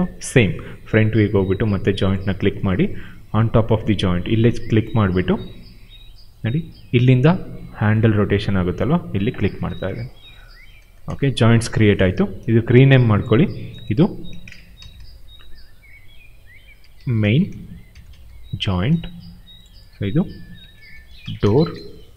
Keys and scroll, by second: 8.8 w, 10.8 space, 14.4-15.4 typing, 16.5-18.7 typing, 20.2-22.1 typing.